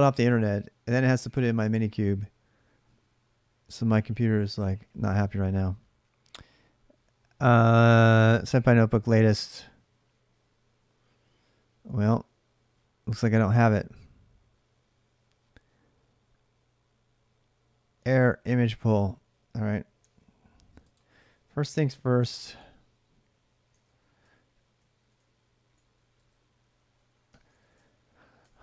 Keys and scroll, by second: 19.8 alt+Tab, 21.5 ctrl+a, 22.0 2, 23.5 ctrl+[, 23.6-28.6 typing, 24.0 Return, 28.2 ctrl+[.